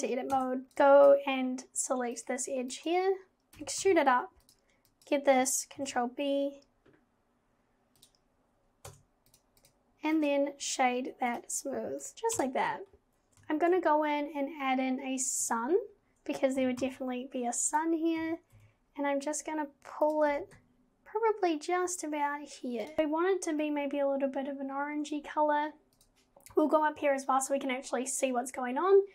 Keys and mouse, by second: 0.3 Tab, 0.6 KP_0, 0.7 click, 0.9 click, 2.1 click, 2.8 click, 3.6 e, 5.0 click, 5.8 ctrl+b, 8.9 Tab, 9.6 click, 12.0 click, 12.4 KP_0, 13.6 shift+a, 16.6 g, 18.2 g, 20.3 g, 26.0 click.